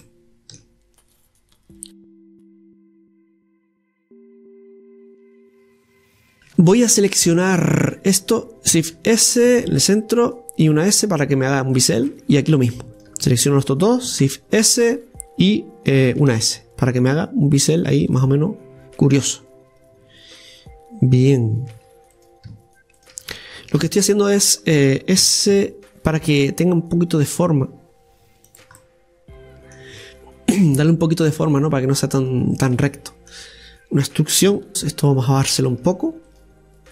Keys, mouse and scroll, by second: 1.9 shift+right click, 2.7 e, 4.6-6.2 middle drag, 6.2-8.8 right drag, 8.8 shift+s, 9.7 shift+s, 10.6 s, 12.1 middle click, 13.0-14.2 right drag, 14.2 shift+s, 16.3 s, 18.2-21.2 middle drag, 22.1-23.7 right drag, 23.8 shift+s, 28.9-31.5 middle drag, 31.5 click, 31.5 scroll up 1, 32.5 shift+right click, 32.9-34.5 middle drag, 35.6-36.9 right drag.